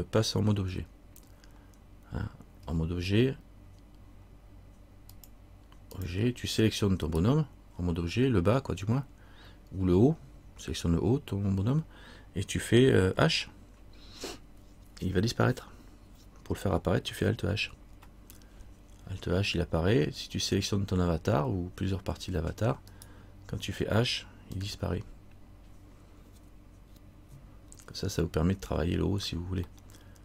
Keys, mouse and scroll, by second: 0.9 Tab, 2.8 Tab, 5.3 click, 7.2 right click, 23.1 right click, 24.7 h, 29.9 middle click.